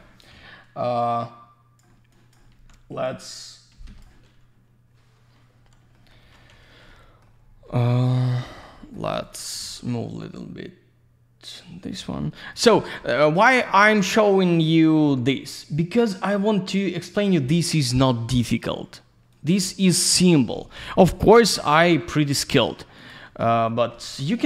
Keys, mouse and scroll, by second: 1.0 click, 2.1 click, 3.0 click, 3.8 Escape, 5.9 middle click, 7.4 scroll down 1, 8.1 scroll down 1, 8.4 alt+middle click, 8.9 double middle click, 9.2 click, 10.2 click, 12.0 middle click, 12.6 middle click, 13.0 alt+middle click, 14.0 click, 15.6 click, 18.6 click, 19.3 click, 20.7 Delete, 21.5 click, 21.8 ctrl+a, 23.0 click, 23.9 alt+middle click.